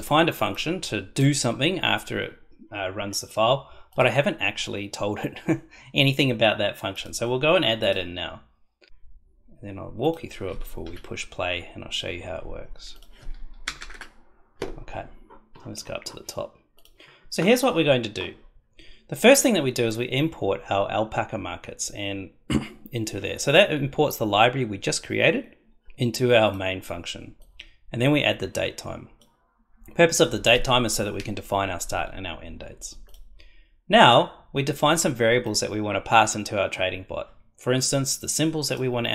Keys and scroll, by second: 8.9 ctrl+c, 10.8 ctrl+v, 13.6 Return.